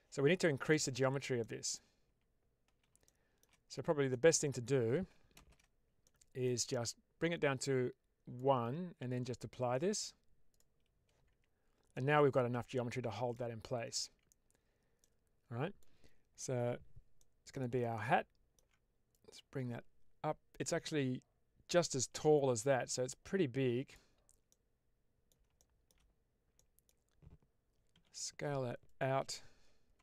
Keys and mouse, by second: 1.3 middle click, 2.0 Tab, 3.1 shift+middle click, 4.0 middle click, 5.2 shift+space, 5.9 middle click, 7.5 click, 9.6-10.5 drag, 11.2 Tab, 11.8-13.3 middle drag, 13.9 Tab, 14.9-15.7 middle drag, 17.1 middle click, 17.8 alt+middle click, 19.0-23.9 drag, 24.4-25.2 middle drag, 25.5-25.8 shift+middle drag, 26.4 middle click, 27.8 s, 28.8 click, 29.8 Tab.